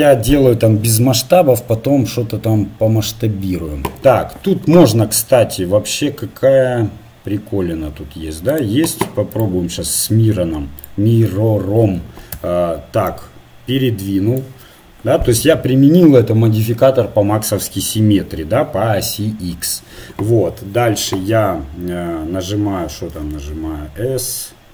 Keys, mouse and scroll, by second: 8.5-11.2 drag, 13.1 Tab, 23.0 s.